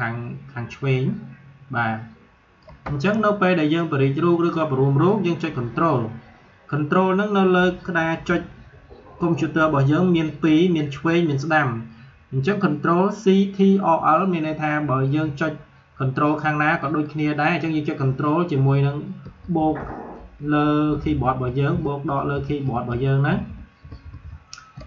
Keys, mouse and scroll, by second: 3.6-9.4 drag, 15.0-19.2 drag, 19.1 ctrl+=, 20.8 -, 21.6 ctrl+=, 22.0 ctrl+-, 22.2 ctrl+=, 22.5 ctrl+-, 22.7 ctrl+=, 23.6 ctrl+-.